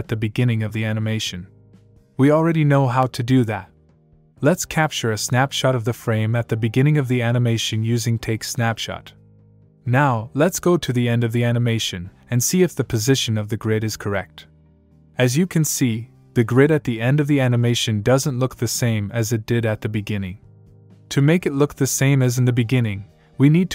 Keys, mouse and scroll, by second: 0.5 click, 6.9 click, 9.2 click, 10.7 click, 14.7 click.